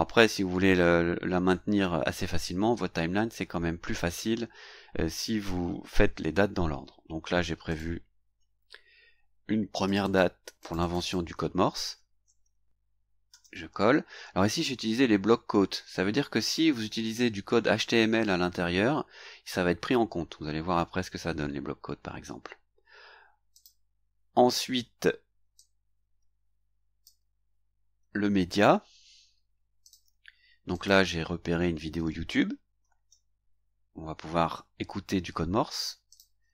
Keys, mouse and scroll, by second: 7.7 click, 9.8 click, 10.6 click, 11.9 ctrl+c, 13.3 ctrl+v, 23.5 click, 25.5-27.2 drag, 27.7 scroll down 2, 29.8 click, 30.7 click, 32.8 ctrl+c, 36.1 click.